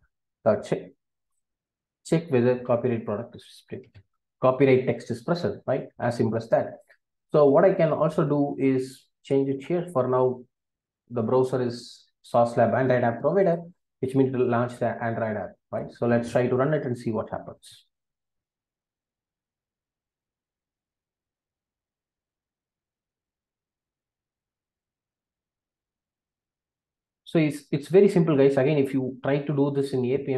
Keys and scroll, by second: 2.6 Return, 3.8 Delete.